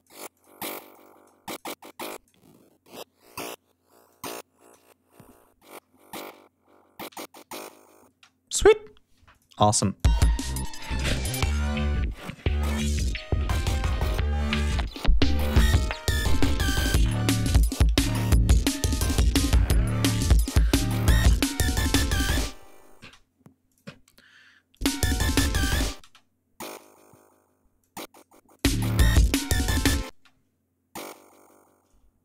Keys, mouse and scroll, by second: 0.2-0.9 drag, 0.9 click, 1.3-1.9 drag, 2.7 click, 3.5 click, 5.3 ctrl+scroll down 2, 5.6 ctrl+scroll up 2, 6.6 g, 6.8 ctrl+scroll up 2, 7.6 ctrl+space, 8.8 click, 9.4 click, 9.6 space, 9.9 ctrl+scroll down 2, 10.2-10.9 ctrl+scroll up 4, 10.9 ctrl+scroll down 2, 22.5 space, 23.2-23.8 drag, 23.8 ctrl+scroll up 2, 24.2 ctrl+click, 24.4 space, 24.7 ctrl+scroll up 2, 25.4 d, 25.6 space, 26.1 click, 27.3 click, 28.0 click, 28.2 space, 29.1 scroll up 2, 29.7 space, 30.5 click, 32.0-32.2 shift+drag.